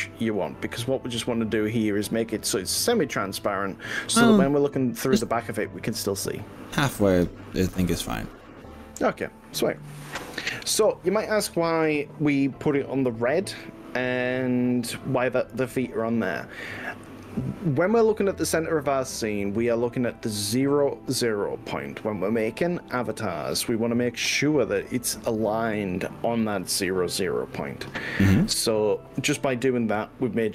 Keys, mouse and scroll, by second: 8.0-9.8 middle drag, 12.8-20.2 middle drag, 25.0-26.2 middle drag, 29.1-30.5 middle drag.